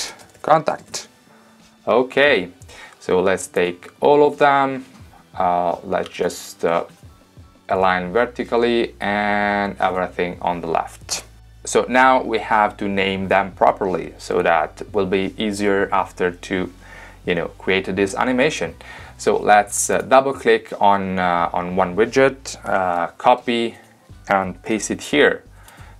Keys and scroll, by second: 0.2-2.2 typing, 22.9 super+c, 24.7 super+v.